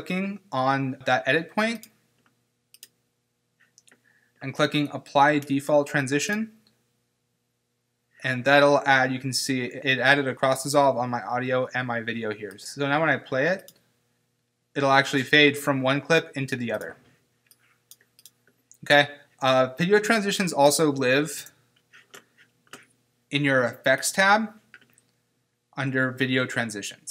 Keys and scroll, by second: 21.4 BackSpace.